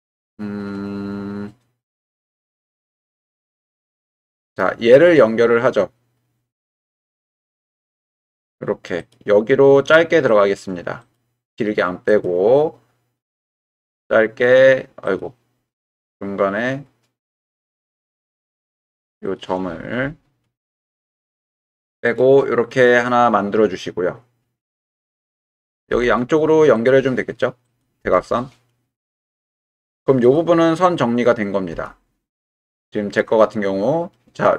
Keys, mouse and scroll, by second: 3.0 middle click, 4.0 middle click, 6.9 k, 19.2 click, 20.6 ctrl+Delete, 22.2 click, 25.9 k, 29.6 k, 33.4 click.